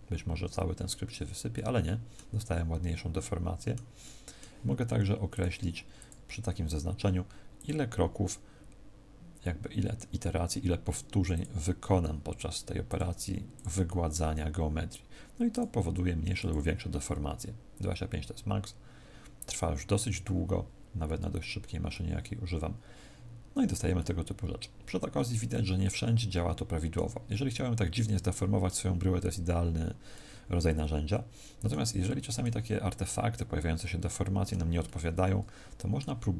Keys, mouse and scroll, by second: 1.5 middle click, 2.3 middle click, 5.2 middle click, 5.2 click, 7.5 click, 12.8 click, 15.4 click, 21.8 middle click, 30.1 middle click, 32.0 middle click, 33.9 middle click, 34.7 middle click.